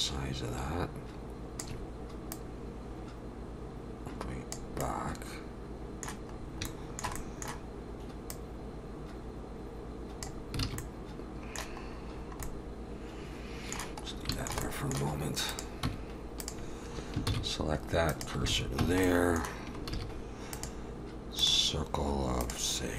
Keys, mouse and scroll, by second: 2.3 click, 4.8 middle click, 6.4-7.1 scroll up 2, 6.7 shift+middle click, 7.2 middle click, 8.3 click, 10.6 alt+a, 10.8 middle click, 12.1-13.1 scroll down 3, 12.4 middle click, 14.3 shift+middle click, 14.6 middle click, 15.9 Tab, 15.9 click, 16.4 click, 17.3 shift+s, 18.5 alt+a, 18.8 Tab, 19.0 middle click, 19.9 shift+a, 22.4 click.